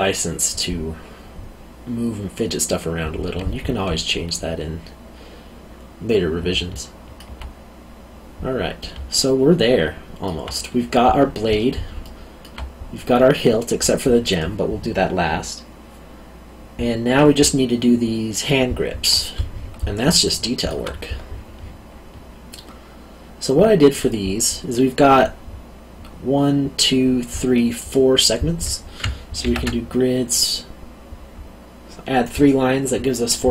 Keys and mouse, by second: 6.7 alt+middle click, 9.1 alt+middle click, 12.0 alt+middle click, 20.2 alt+middle click, 29.4 ctrl+r.